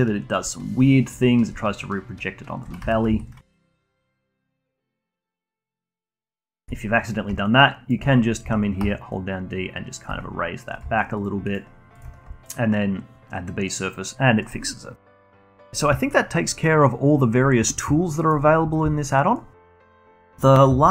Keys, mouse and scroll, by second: 3.4 ctrl+z, 3.6 ctrl+z, 3.8 alt+drag, 4.1 alt+middle drag, 4.3-5.3 alt+drag, 5.3 d, 5.5 click, 5.8 d, 6.1 click, 6.6 d, 7.4-8.8 shift+right drag, 8.8 d, 9.1 right click, 10.0 d, 10.7 click, 11.1 shift+click, 11.4 shift+right click, 12.4-14.9 alt+drag, 18.1 middle click, 19.0-19.6 alt+drag, 19.6 alt+middle drag, 19.9 alt+click, 20.2-20.9 alt+middle drag.